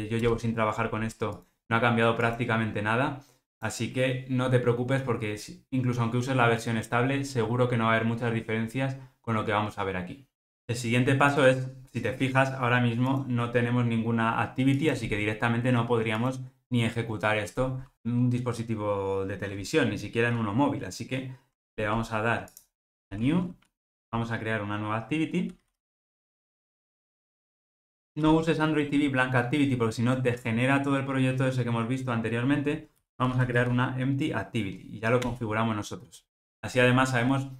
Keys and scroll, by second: 23.2 super+n.